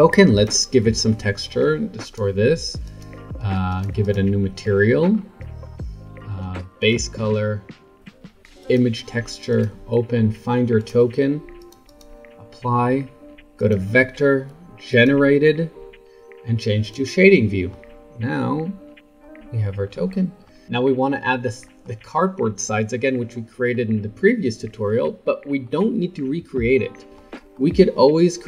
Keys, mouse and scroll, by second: 0.3 click, 2.0-3.8 drag, 4.0-5.0 drag, 5.0 scroll down 4, 5.6 scroll up 2, 6.8-7.7 drag, 8.0 click, 8.7-12.0 drag, 13.6-16.0 drag, 16.0-16.8 middle drag, 16.8 click, 17.2-17.8 middle drag, 17.8-18.4 scroll down 2, 18.4-18.8 scroll up 2, 19.2-28.4 middle drag.